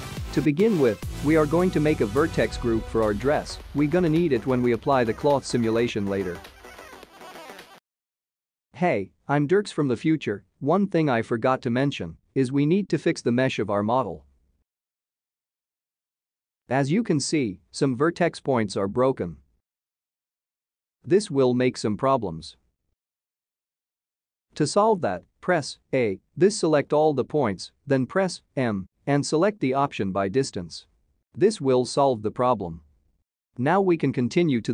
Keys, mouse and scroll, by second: 0.6 click, 1.3 middle click, 2.3-3.1 scroll up 4, 3.2 shift+middle click, 4.1 click, 6.1 middle click.